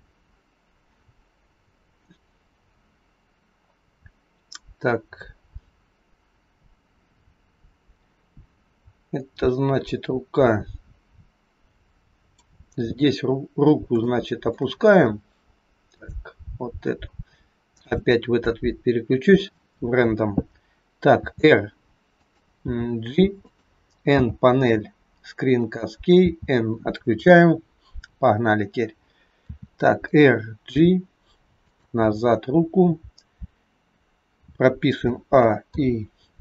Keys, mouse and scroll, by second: 26.2 n, 30.7 g, 35.7 i.